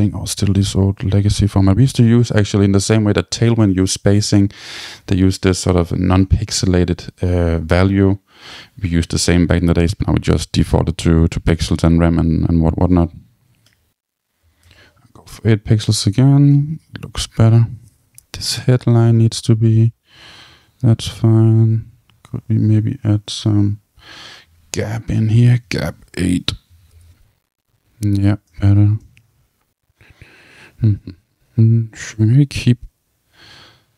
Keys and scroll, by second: 13.3 Tab, 14.2 Tab, 26.5 Return.